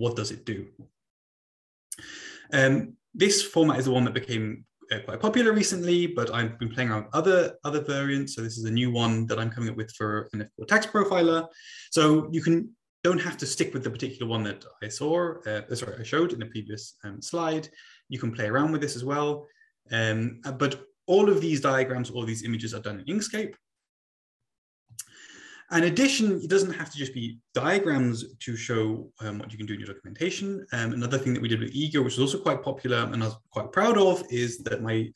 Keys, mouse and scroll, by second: 8.0 Right, 24.9 Right.